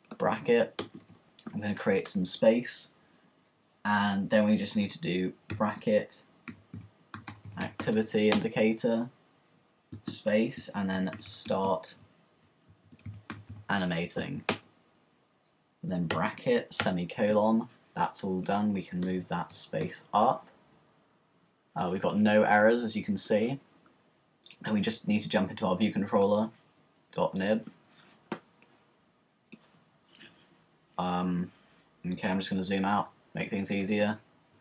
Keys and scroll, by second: 0.8 Return, 5.5-8.4 typing, 9.8 typing, 11.0-11.8 typing, 12.9-13.8 typing, 14.5 Return, 16.1-16.8 typing, 17.9 typing.